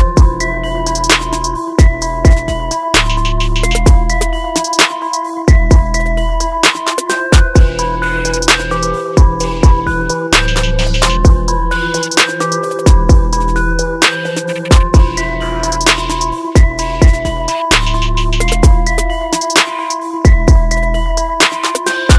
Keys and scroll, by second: 5.4 ctrl+=, 7.7 ctrl+t, 16.1 ctrl+0, 19.3 ctrl+=.